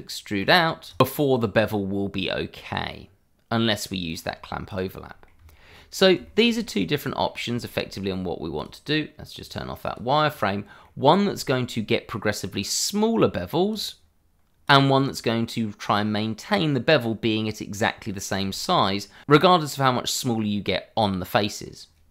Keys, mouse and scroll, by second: 0.1 middle click, 0.5 click, 1.1 e, 4.0 click, 4.3 scroll down 1, 4.6 click, 5.0 middle click, 5.3 Tab, 6.2 shift+middle click, 6.3 middle click, 7.6 shift+middle click, 7.6 middle click, 8.5 click, 10.4 double click, 10.8 middle click, 11.5 shift+middle click, 13.7 click, 15.0 middle click, 18.5 shift+middle click, 18.9-19.2 scroll up 1, 19.7 middle click, 20.9 scroll down 1, 21.2 middle click.